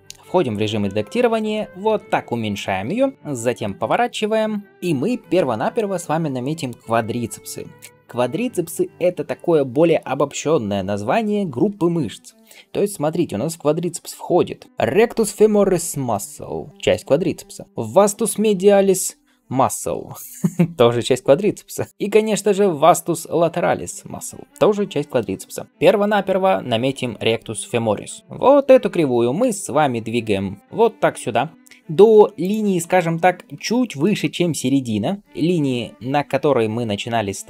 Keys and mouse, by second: 0.0 Tab, 0.0-27.7 middle drag, 1.8 s, 2.7 s, 3.8 r, 28.2-37.4 middle drag, 29.3 g.